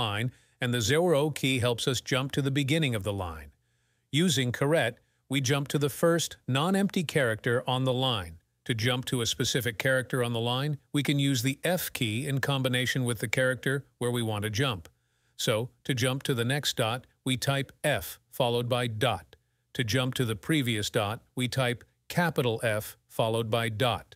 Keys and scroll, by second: 0.8 0, 4.6 shift+6, 18.0 f, 18.3 ., 20.5 shift+4, 22.6-23.4 typing.